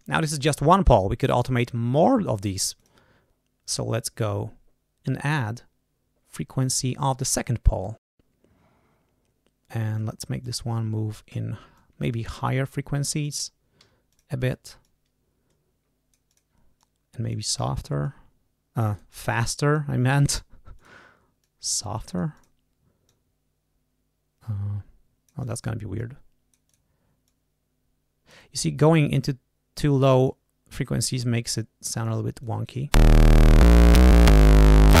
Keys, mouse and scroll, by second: 2.7 click, 7.1 click, 7.6-8.1 scroll down 1, 8.1 scroll up 1, 9.9 click, 10.7 scroll down 1, 11.7 click, 12.5 click, 13.7 d, 14.0 click, 14.7-16.5 drag, 16.7 click, 17.9-19.3 drag, 19.6 click, 20.7 click, 21.3-22.5 drag, 23.0-25.6 drag, 25.9 click, 27.2-28.4 drag, 29.0-30.4 drag, 31.4 click, 32.3 click, 32.8 space.